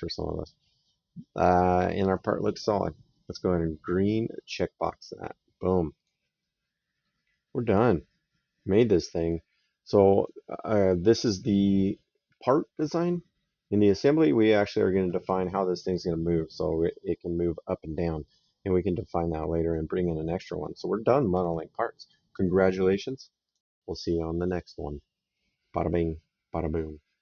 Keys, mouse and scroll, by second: 0.5 right click, 4.3 click, 5.8 click, 6.3 right click, 19.0 right click, 23.3 click.